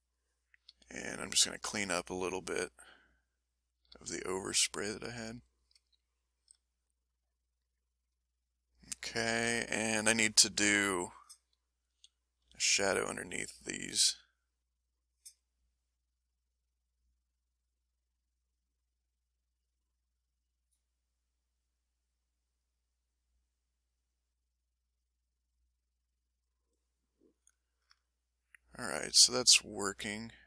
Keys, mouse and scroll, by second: 0.0 click, 0.7 s, 1.5 click, 2.0 click, 3.0 click, 3.9 s, 4.3-5.5 drag, 6.2-8.9 ctrl+middle drag, 9.3 middle click, 10.5 click, 11.2 click, 11.9 s, 12.4 f, 13.1 click, 13.7 click, 14.2 click, 15.2 click, 15.7-17.2 drag, 17.3 middle click, 17.9 middle click, 19.1 click, 20.3-23.5 drag, 23.9 click, 24.9 click, 25.3 click, 25.8 click, 27.0 click.